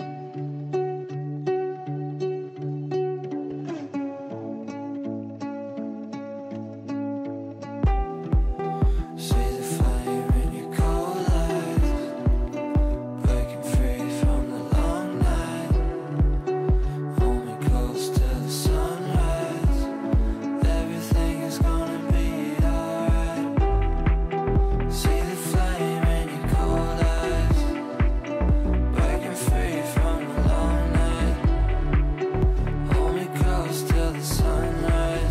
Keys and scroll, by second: 15.7 ctrl+z, 33.3-34.2 typing.